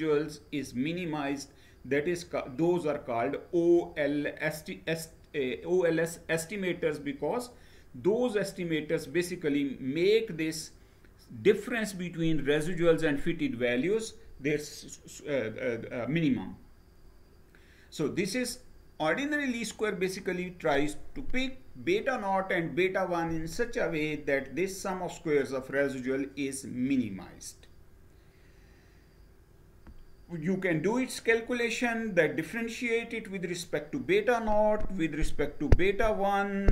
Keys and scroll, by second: 15.9 Down.